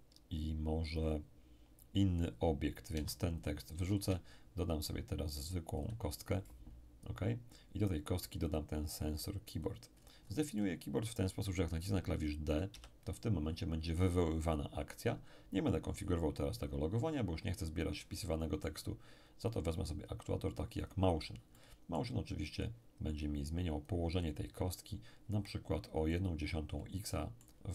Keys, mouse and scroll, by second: 2.9 x, 3.4 click, 3.9 shift+a, 5.8 click, 6.6-7.7 scroll down 1, 8.5 click, 9.7 click, 9.9-10.5 scroll up 1, 10.5-12.0 middle drag, 12.5 click, 12.7 d, 17.3-18.2 scroll down 1, 18.2-20.5 middle drag, 19.5 click, 20.8 click, 21.5-24.7 middle drag, 23.9 click, 24.7-25.8 scroll down 1, 26.1-27.7 drag, 27.1-27.7 middle drag.